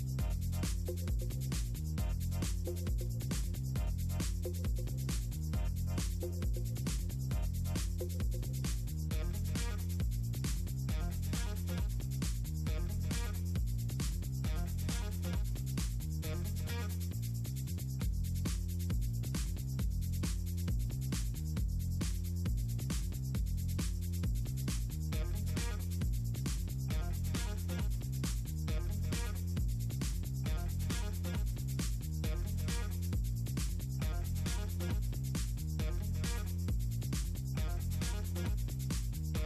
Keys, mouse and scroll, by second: 1.6 middle click, 2.3 middle click, 2.9 middle click, 3.8 middle click, 4.4 middle click, 4.9 middle click, 6.9 click, 10.5 middle click, 11.0 scroll down 2, 11.1 middle click, 11.7 middle click, 13.1-16.5 drag, 17.0 middle click, 17.9 middle click, 18.7 middle click, 19.3 middle drag, 19.9 middle drag, 21.3-28.9 drag, 33.2 click, 34.5 click, 38.0 ctrl+scroll down 2.